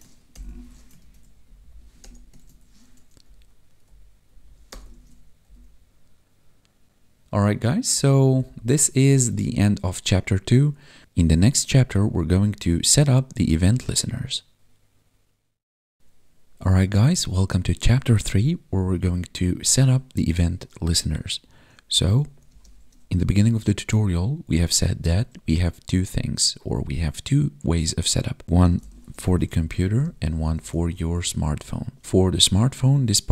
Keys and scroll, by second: 0.3 ctrl+v, 0.5 ctrl+s, 1.4 Down, 2.0 Delete, 2.4 ctrl+s, 3.2 Up, 4.3 Down, 4.9 ctrl+s, 5.4 Up, 8.1 Down, 21.8 Left, 22.4 space, 29.9 space, 32.0 Right, 32.1 ctrl+shift+Left.